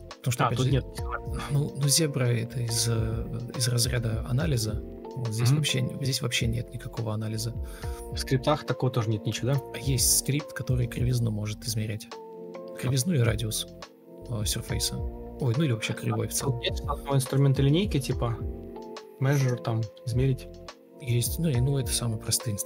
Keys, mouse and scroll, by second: 0.1 ctrl+d, 1.3 ctrl+space, 4.1 ctrl+d, 8.9 Escape, 9.4 ctrl+f, 16.7 ctrl+u, 17.7-19.6 typing, 20.6 Escape, 20.8 Delete, 22.5 Escape.